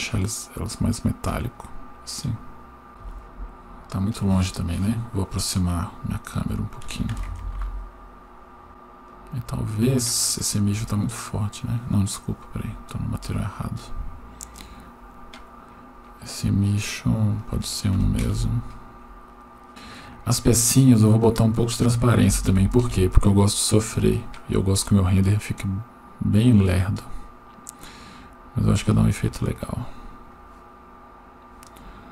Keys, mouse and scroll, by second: 1.6-2.9 drag, 7.3 ctrl+alt+KP_0, 8.7 right click, 9.1 click, 9.7 scroll down 2, 10.2-11.4 scroll down 4, 12.9-14.0 scroll up 8, 14.5 click, 14.5 scroll up 1, 15.1-15.8 scroll down 5, 16.9-17.5 scroll down 1, 17.5 click, 19.7 right click, 21.2-22.9 drag, 25.7 scroll up 1, 27.1-28.8 scroll down 1, 28.9-30.4 drag, 31.8-32.1 scroll up 4.